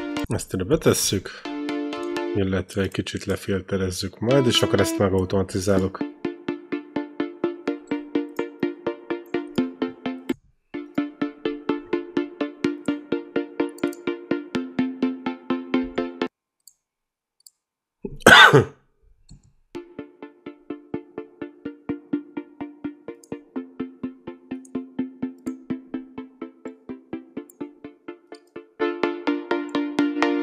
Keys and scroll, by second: 0.1 space, 0.9 ctrl+l, 1.2 space, 4.1 e, 5.5 space, 10.1 space, 16.0 space, 19.6 space.